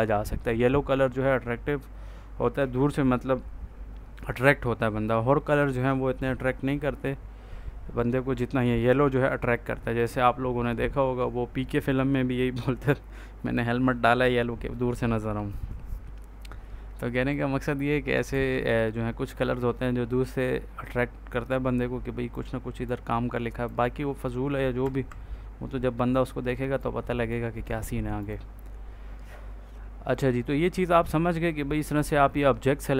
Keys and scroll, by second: 18.2 ctrl+a, 24.7 F4.